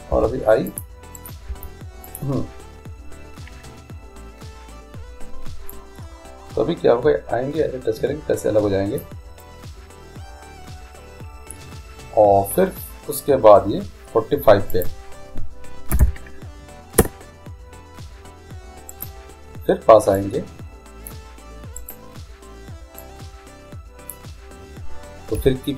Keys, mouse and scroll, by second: 0.3 i, 1.3-2.8 right drag, 1.6 i, 5.9-7.7 drag, 14.9-16.9 drag, 19.1-20.9 right drag, 20.3-22.2 drag, 21.9-23.7 right drag, 23.2-24.9 drag, 25.0 click, 25.5 i.